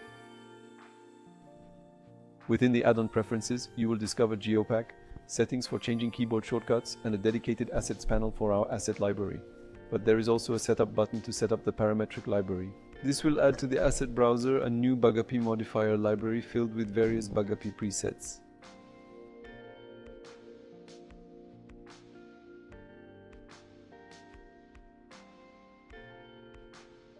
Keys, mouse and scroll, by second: 2.3 ctrl+,, 20.2 click, 22.1 click, 22.6 click, 23.4 click.